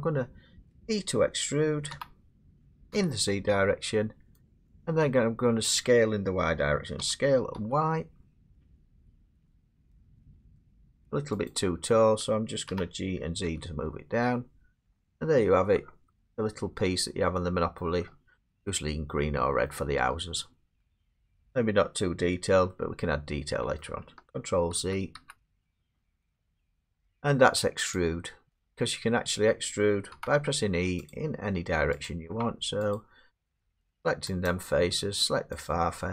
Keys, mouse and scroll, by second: 1.9 e, 2.9 z, 4.5 click, 7.1-7.6 typing, 11.5 click, 12.7 g, 13.5 z, 14.9 click, 15.4-16.2 scroll, 17.8 middle click, 18.1 middle click, 18.1 middle click, 18.2 middle click, 19.0 scroll, 19.6 middle click, 19.9 scroll down 7, 20.1 scroll, 20.8 scroll, 22.7 scroll down 2, 23.0 scroll, 23.8 middle click, 24.8 ctrl+z, 25.2 ctrl+z, 25.9 ctrl+z, 27.9 click, 30.1 e, 31.1 click, 32.1 click, 32.3 e, 32.9 click, 33.5 click, 33.5 middle click, 33.6 e, 34.0 scroll down 2, 34.5 click, 34.9 scroll up 1, 35.2 middle click, 35.7 click.